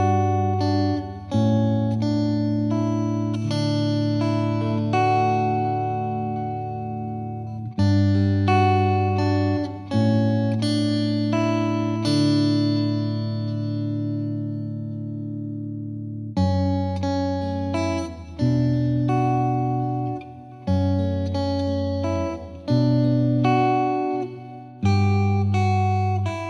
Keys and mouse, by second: 1.0 click, 1.3 click, 1.9 click, 2.2 click, 2.4 click, 2.7 click, 3.1 click, 3.6 click, 4.3 click, 4.6 click, 5.1 click, 5.3 click, 6.0 click, 6.6 click, 8.0 click, 9.1 click, 10.2 click, 10.2 click, 11.1 click, 11.2 click, 11.7 click, 11.9 click, 12.2 click, 12.3 click, 13.4 click, 13.5 click, 13.8 click, 14.5 click, 14.9 click, 15.3 click, 16.0 click, 16.2 shift+click, 16.5 shift+click, 17.0 click, 17.6 click, 18.1 click, 18.6 click, 18.9 click, 19.2 click, 19.9 click, 20.4 click, 20.9 click, 21.2 click, 21.8 click, 22.1 click, 22.7 click, 24.6 click, 25.1 click, 25.7 click, 26.1 click.